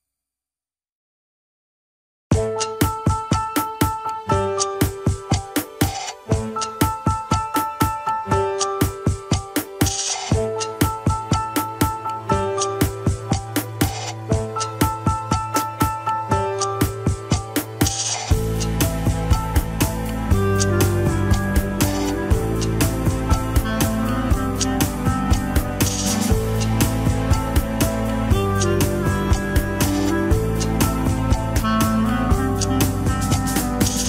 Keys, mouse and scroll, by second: 0.0-2.0 drag, 4.0 middle click, 4.5 scroll up 3, 4.8-6.2 middle drag, 6.2 KP_3, 7.2 click, 7.9-9.1 drag, 9.1 scroll up 3, 9.6 click, 10.2 Tab, 10.5 alt+z, 10.9-12.3 shift+middle drag, 12.3 scroll up 2, 12.8 shift+middle click, 13.4 ctrl+Tab, 13.7 alt+z, 14.0 click, 14.4 h, 15.4 alt+h, 15.9 click, 16.5 Tab, 16.6 Tab, 17.0 Tab, 17.4 alt+z, 17.9 click, 18.4 l, 18.8 alt+z, 19.5 h, 19.9 scroll up 1, 20.2 alt+z, 20.4 click, 21.2 ctrl+l, 23.1 click, 24.0 ctrl+l, 24.4 p, 25.2 Tab, 25.8 alt+z, 27.1 click, 27.9-28.5 scroll down 2, 28.6 click, 29.4 h, 30.0 click, 30.8 shift+click, 31.4 shift+h, 31.6 click, 31.8-32.1 scroll up 1, 32.1 Tab, 32.3 alt+z, 32.9 click, 33.7 ctrl+l.